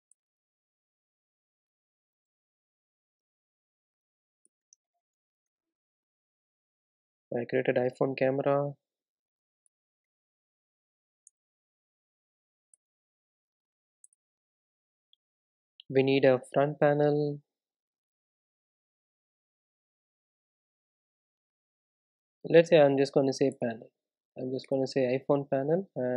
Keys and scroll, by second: 9.7 super+e, 9.9 super+e, 11.3 super+Return, 12.4 super+z, 12.8 alt+Return.